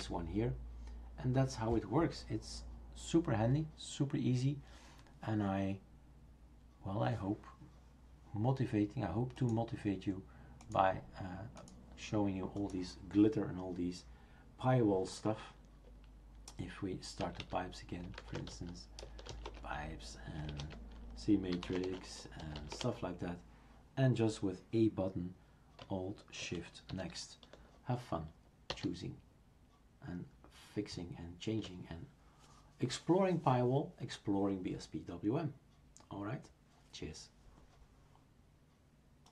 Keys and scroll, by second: 17.0-19.3 typing, 19.5 Return, 20.5 super+Return, 21.4-23.1 typing, 26.9 alt+shift+n, 28.7 alt+shift+n.